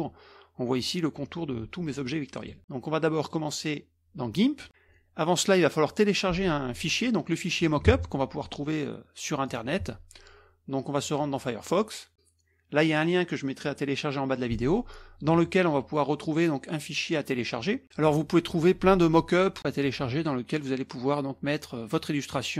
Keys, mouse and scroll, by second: 3.2 click, 7.8 alt+Tab, 9.5 alt+click, 11.0-11.7 drag, 15.3 click, 21.3-22.5 scroll down 2.